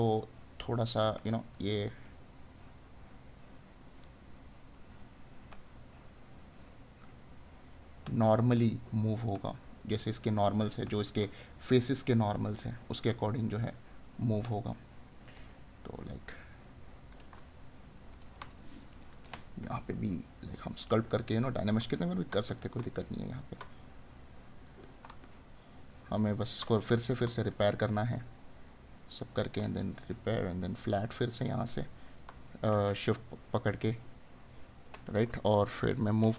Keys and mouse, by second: 1.3 right click, 5.6 right click, 11.2 right click, 12.8 right click, 14.6 right click, 17.6 right click, 26.7 right click.